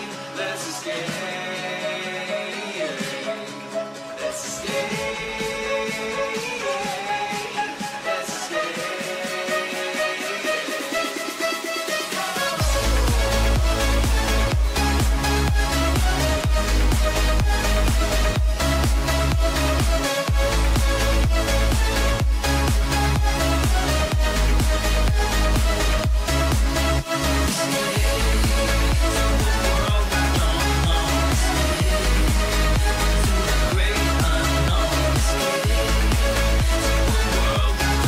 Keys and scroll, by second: 3.0 [, 7.1 [, 17.2 \, 24.1 g, 34.7 b, 37.8 6, 38.0 0.